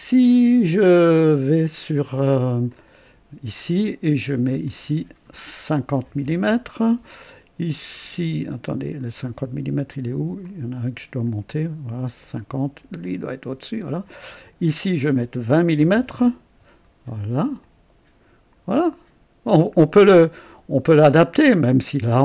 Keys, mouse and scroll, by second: 2.6 click, 4.6 click, 6.0 KP_5, 6.2 KP_0, 6.5 Return, 10.4 click, 13.0 click, 14.4 click, 15.8-16.1 typing, 16.1 KP_Enter, 17.6 click, 18.8-21.8 drag.